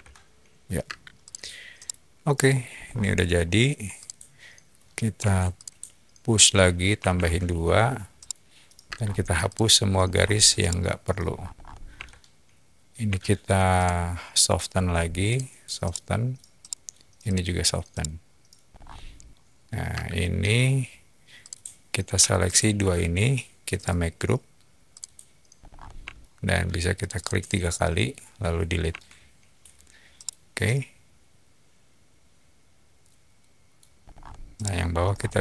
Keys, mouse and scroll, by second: 0.8 space, 1.2 click, 1.7-2.5 middle drag, 2.7 scroll up 2, 3.9 click, 5.1 p, 5.5 click, 6.9 typing, 7.1 Return, 8.2 middle click, 8.8 space, 8.8 middle click, 9.4 click, 10.0 middle click, 10.0 scroll down 2, 10.5-11.0 middle drag, 11.2-11.6 scroll up 3, 11.9 e, 13.7 ctrl+click, 14.7 middle click, 15.2 click, 15.8 middle click, 16.6 middle click, 17.2 click, 17.9 middle click, 18.7 scroll down 2, 19.9 space, 21.4 click, 22.3 shift+click, 23.7 right click, 24.9 click, 25.6 middle click, 25.6 scroll, 26.0-26.4 shift+middle drag, 27.0 click, 27.2 click, 27.3 click, 28.8 Delete, 30.1-33.6 middle drag, 34.0 scroll up 1, 34.5-34.8 middle drag, 35.0 scroll up 1.